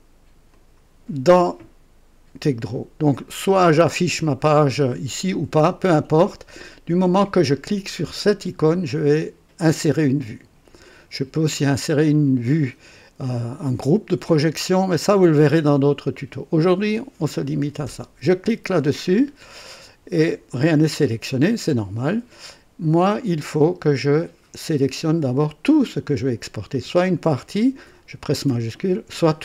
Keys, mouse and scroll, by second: 0.5 click, 3.6 click, 6.0 click, 18.4 click, 21.3 click, 23.1 click, 28.8 shift+click.